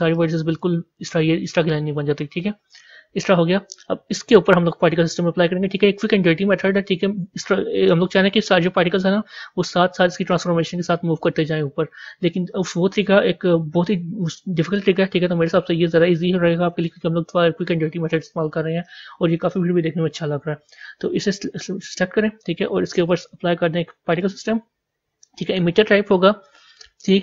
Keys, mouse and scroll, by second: 3.2 Tab, 24.1-27.2 drag.